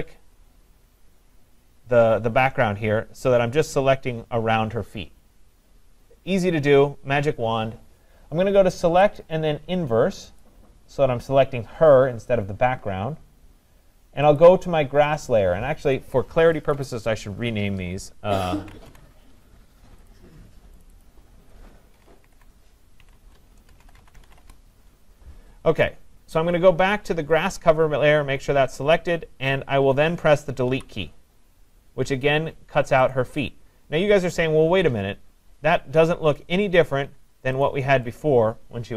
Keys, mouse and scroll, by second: 0.0 click, 1.2-5.0 drag, 9.2 click, 10.4 click, 14.4 click, 16.0 click, 16.7 click, 16.9 click, 18.4-18.9 typing, 20.1 click, 20.8 click, 21.1 click, 21.7-24.3 typing, 24.4 Return, 27.4 typing, 27.5 click, 30.7 Delete, 33.1 click, 33.5 click, 37.7 click, 38.2 click.